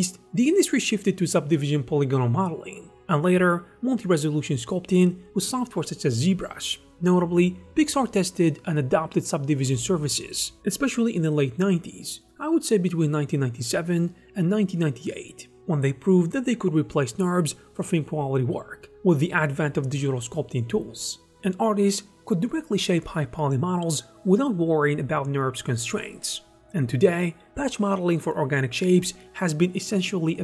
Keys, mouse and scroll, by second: 0.5 ctrl+r, 0.6-2.9 typing, 2.7 Return.